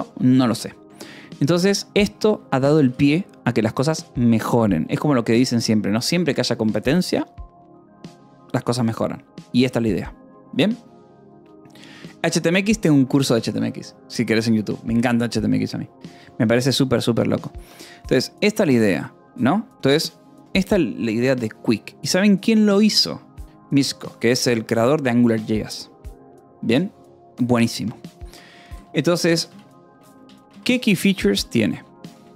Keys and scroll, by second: 1.3 Escape, 1.6 o, 2.2 Escape, 2.5 k, 3.3 Escape, 4.5 j, 29.4-32.3 typing.